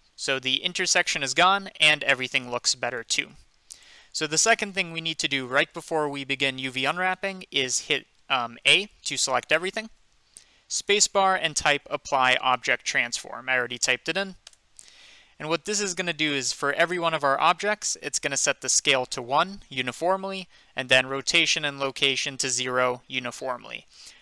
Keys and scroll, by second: 8.6 a, 14.5 Return.